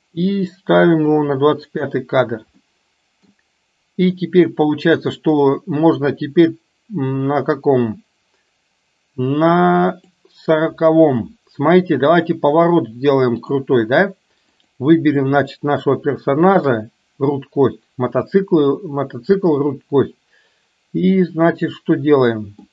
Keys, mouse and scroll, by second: 2.6 middle click, 10.2 drag, 11.3-13.6 middle drag, 14.4 click, 21.2-22.7 middle drag.